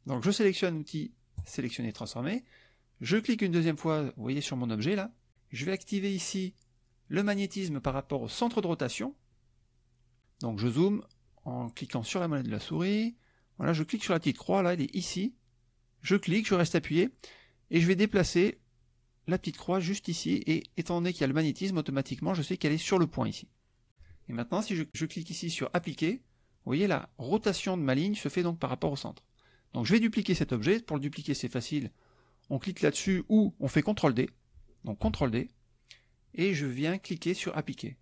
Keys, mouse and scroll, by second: 1.4 click, 3.1 click, 8.4 click, 12.0 middle click, 12.7 middle click, 16.3-22.5 drag, 23.9 KP_Subtract, 25.8 click, 35.0 ctrl+d, 37.6 click.